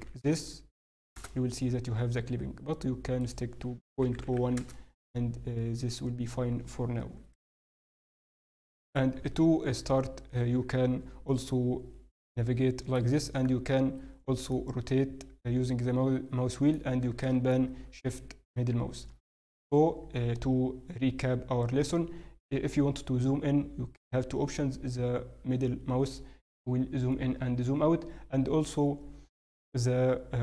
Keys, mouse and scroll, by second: 0.0 0, 3.2 click, 7.1 n, 7.6-7.9 scroll, 7.9 middle click, 7.9-8.8 scroll down 4, 9.3-9.7 scroll, 9.7-11.2 scroll up 1, 11.2 middle click, 11.2-12.5 scroll down 1, 14.5 middle click, 23.7-24.6 scroll down 1, 24.6 scroll up 1, 25.5-25.8 scroll down 4, 26.1-26.4 scroll up 9, 26.8-27.3 scroll down 5, 27.3-28.8 scroll up 1, 29.9 scroll down 7.